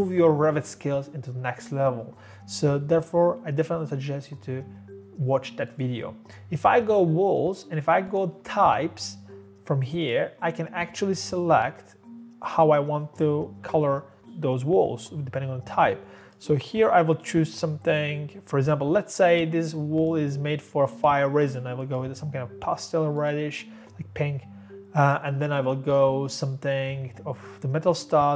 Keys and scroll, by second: 8.3 typing.